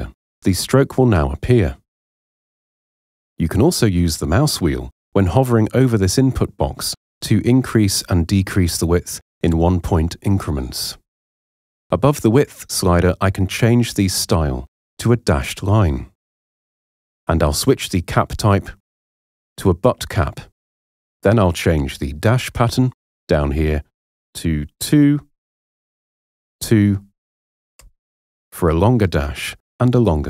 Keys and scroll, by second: 24.8 2, 25.7 Tab, 26.3 2, 27.8 Return.